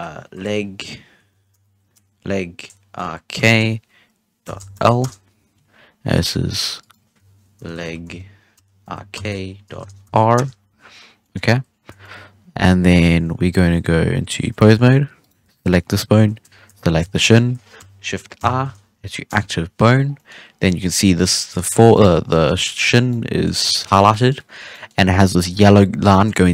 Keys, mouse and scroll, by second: 6.1 right click, 6.7-9.9 drag, 11.1 scroll down 1, 11.2 middle drag, 11.4-11.9 scroll up 1, 11.9-13.2 shift+middle drag, 13.2 ctrl+Tab, 15.2 right click, 15.6-17.2 middle drag, 17.2 shift+right click, 18.3 shift+i, 20.0-20.6 scroll down 4, 20.1-20.4 middle drag, 20.6 middle drag, 20.8-21.1 scroll up 2, 21.1 right click, 21.5 g, 22.1 scroll down 1, 22.2-22.7 middle drag, 22.7-23.0 scroll up 1, 23.0-23.9 middle drag, 23.9 scroll down 1, 24.0-24.4 middle drag, 24.4 scroll up 1, 24.7-26.5 middle drag.